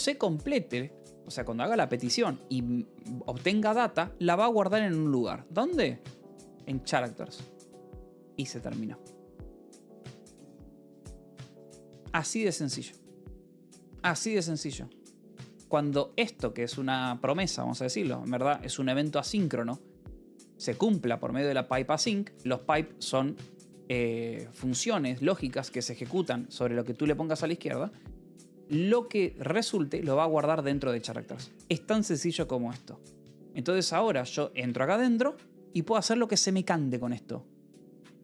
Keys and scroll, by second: 1.0 l, 1.6 a, 3.5 space, 5.3-7.5 typing, 8.4 Escape, 9.7 ctrl+s, 13.3 h, 15.1-17.3 typing, 17.1 Escape, 19.9-25.4 typing, 21.3 Escape, 23.2 Escape, 26.7 b, 27.5 e, 28.6 l, 29.7 v, 30.3 h, 31.3 Escape, 33.6 c, 34.6 Return, 37.7 Tab.